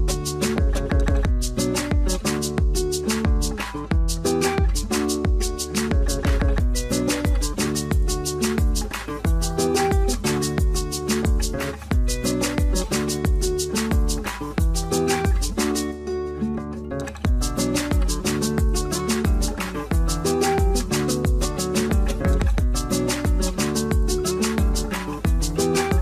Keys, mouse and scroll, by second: 0.0 middle click, 0.3-1.9 scroll up 1, 2.0 double click, 7.6-8.0 scroll down 1, 8.9 scroll up 1, 9.1 scroll down 1, 9.7 scroll up 1, 11.0-12.4 scroll down 1, 13.2 scroll up 1.